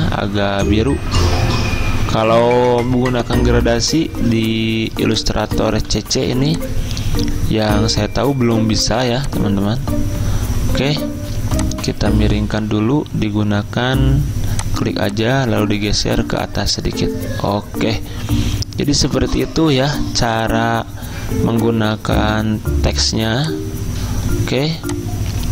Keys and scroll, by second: 4.2 z, 5.9 v, 24.7 z.